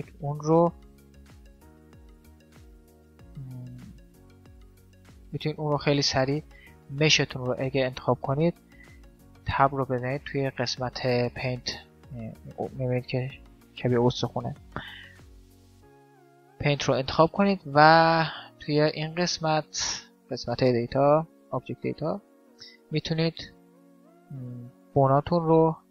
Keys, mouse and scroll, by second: 0.4-2.9 middle drag, 1.3 g, 3.4 ctrl+z, 3.8 middle click, 6.8 middle click, 6.9-8.4 drag, 6.9-8.4 right drag, 8.4-9.8 middle drag, 8.6 Tab, 16.6-18.6 middle drag, 18.6-20.4 drag, 21.8-23.7 drag, 24.2-25.9 drag.